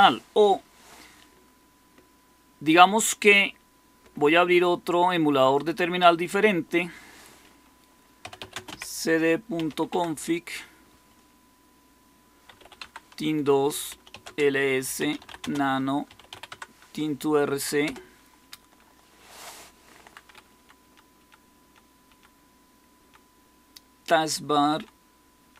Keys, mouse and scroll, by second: 7.9-10.1 typing, 12.1-16.7 typing, 13.5 Return, 17.8-22.0 typing, 20.2 Down, 24.2-25.5 typing.